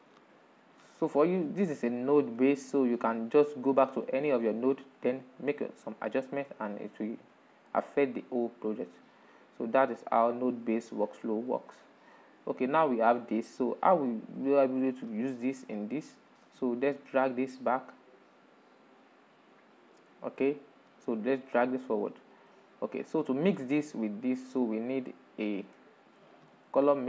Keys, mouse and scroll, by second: 1.0-1.5 scroll down 5, 1.5-2.8 middle drag, 2.8-3.2 scroll down 4, 3.2-6.2 middle drag, 6.2-6.5 scroll up 2, 6.6-11.5 middle drag, 11.5 scroll up 2, 12.6-16.4 middle drag, 16.4 click, 17.7-19.1 drag, 19.2 click, 19.6 middle click, 20.3 click, 21.7-22.9 middle drag, 22.9 click, 24.1 click, 24.9-25.8 middle drag, 25.8 shift+a.